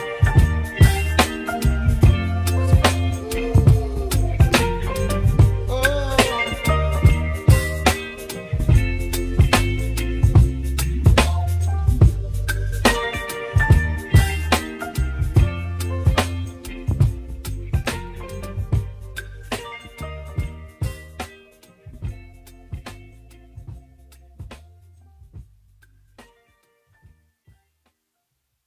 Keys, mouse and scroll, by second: 2.2-3.5 scroll up 4, 3.5 g, 8.8-9.5 scroll down 1, 9.5 click, 10.0-10.5 scroll down 7, 10.5-11.2 scroll up 3, 11.2 scroll down 2, 15.0-16.0 drag, 16.7 click, 17.8 g, 21.1 click, 21.5 Tab, 22.2-23.0 scroll down 1, 23.0-24.0 shift+middle drag, 24.0-24.8 scroll up 2, 24.8 Tab, 26.0-27.3 scroll down 6, 27.3-28.4 drag.